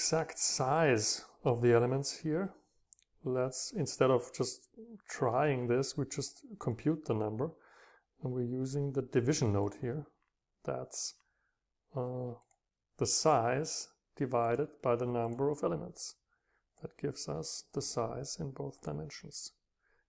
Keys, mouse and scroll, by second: 0.0-0.6 scroll up 2, 0.6-1.7 scroll down 2, 1.9 scroll up 2, 3.8-8.4 drag, 12.6-16.1 drag, 13.3-15.2 scroll down 2, 16.5 click.